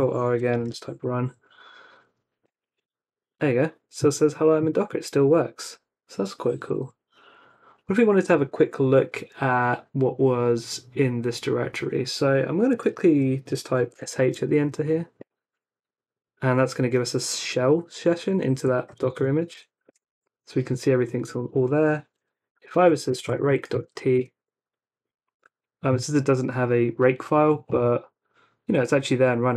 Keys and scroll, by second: 0.3-1.2 typing, 1.5 Tab, 2.4 Return, 7.9 Up, 8.3 space, 13.6-14.4 typing, 15.2 Return, 18.3-20.0 typing, 22.3-24.3 typing.